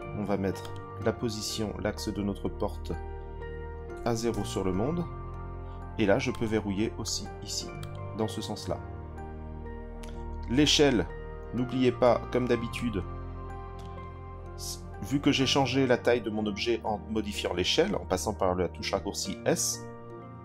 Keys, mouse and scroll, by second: 0.6-4.3 drag, 6.3 click, 7.0 click, 7.8 click, 12.7-13.8 drag.